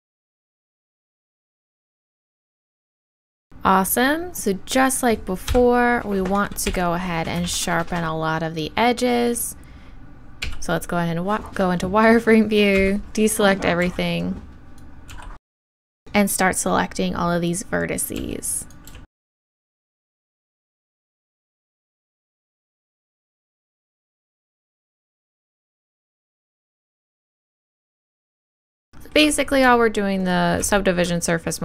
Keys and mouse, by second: 1.3 f, 1.6 f, 2.8 f, 5.5 KP_3, 6.7 KP_1, 10.2 click, 10.4 z, 12.8 a, 15.1 b, 18.2 b, 18.9-20.1 b, 20.2 shift+e, 20.7 click, 21.2 right click, 21.4-24.3 typing, 22.1 right click, 22.4 right click, 23.0 click, 24.6 click, 25.0 click, 25.5 right click, 25.8 click, 26.0 right click, 26.2 click, 26.6 right click, 26.6 shift+e, 27.1-28.4 right drag, 27.8 click, 28.2 shift+w, 28.4 shift+e, 28.7-31.6 drag, 28.8 middle click, 30.2-31.6 middle drag.